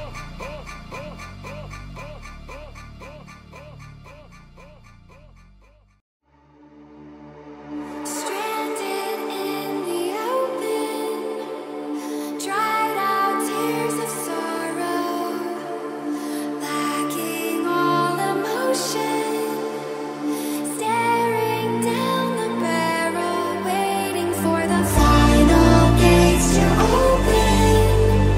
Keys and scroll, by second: 1.5 Up, 10.5 ctrl+r.